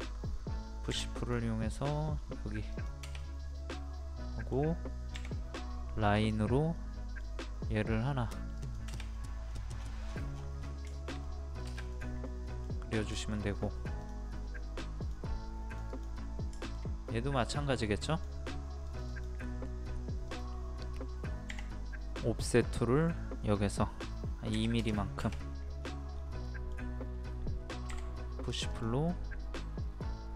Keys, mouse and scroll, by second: 0.9 p, 1.2 click, 3.2-4.7 middle drag, 6.1 click, 6.8 middle click, 8.6 click, 9.2 middle click, 9.4-9.7 scroll down 1, 10.6 scroll up 1, 11.0 shift+middle click, 11.9 click, 12.3 middle click, 13.6 scroll up 1, 14.0 click, 14.4 scroll up 1, 15.0 click, 16.2 scroll up 1, 16.6 shift+middle click, 18.1 click, 19.4-20.1 scroll up 1, 20.3 click, 21.5 o, 22.2 click, 24.5 KP_2, 25.8-26.1 scroll up 1, 27.9-28.7 scroll up 1, 28.7 click.